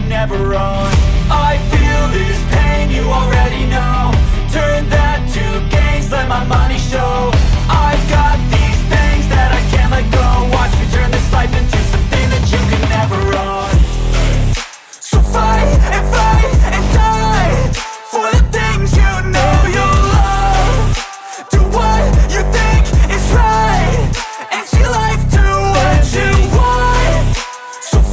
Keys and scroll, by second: 0.5 space, 0.8 KP_Subtract, 1.5 ctrl+s, 5.3 Return, 5.5 Return, 5.9-12.8 typing, 13.8 End, 14.2 shift+[, 14.7 Return, 15.9-16.8 typing, 17.4 Return, 18.9-21.0 typing, 22.2 shift+,, 22.9 space, 23.7 KP_0, 25.0 Tab, 26.7-28.1 typing.